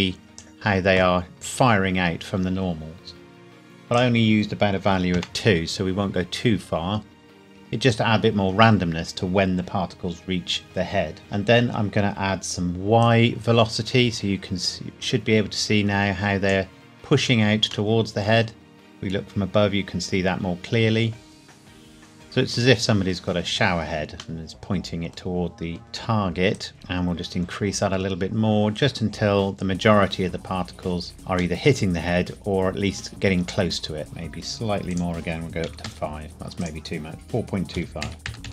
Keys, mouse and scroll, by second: 3.9 click, 4.9 KP_2, 5.1 KP_Enter, 13.0 click, 17.9 middle click, 25.1 scroll up 1, 26.6 click, 31.7 middle click, 34.9 click, 35.7 KP_5, 35.8 KP_Enter, 36.6 click, 37.8 KP_4, 38.0 KP_Decimal, 38.2 KP_2.